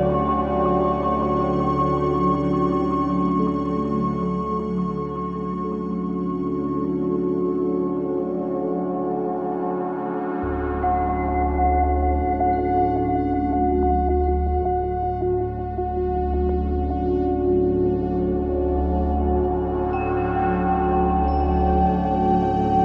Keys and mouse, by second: 0.7 i, 2.9 drag, 3.9 click, 4.9-5.9 typing, 7.0 click, 7.6-8.0 typing, 9.7 click, 10.4-10.7 typing, 12.3 click, 13.1 typing, 13.8 click, 14.3-15.1 typing, 15.8-16.7 drag, 16.8 typing, 17.2 click, 17.7 click, 18.0 click, 18.0 typing, 19.0-20.7 typing, 19.5 click.